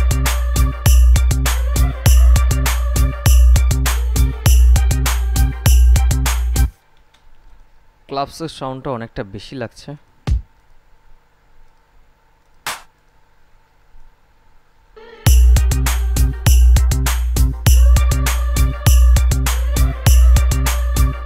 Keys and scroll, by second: 7.4 space, 15.2 space.